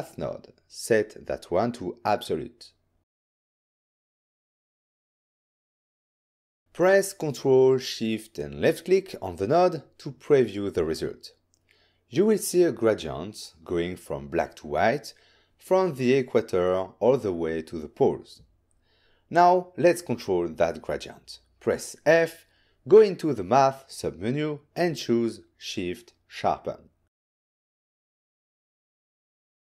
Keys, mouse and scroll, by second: 6.6 Return, 7.0 click, 9.4 ctrl+shift+click, 20.4 middle click, 22.0 click, 22.6 f, 28.6 click.